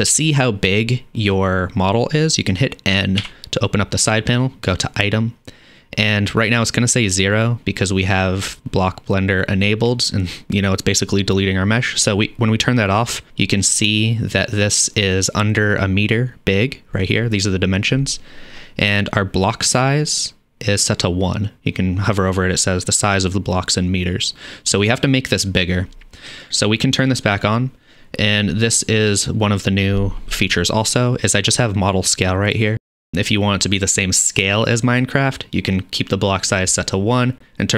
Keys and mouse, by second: 3.2 n, 4.8-13.1 middle drag, 13.1 click, 13.1-27.5 middle drag, 27.5-32.7 drag, 32.7-37.7 middle drag.